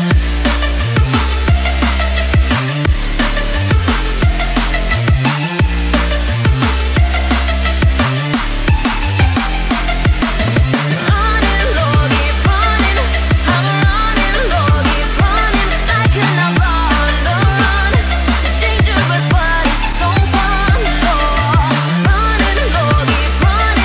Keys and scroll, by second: 2.2 ctrl+t, 4.4 Return, 7.4 ctrl+].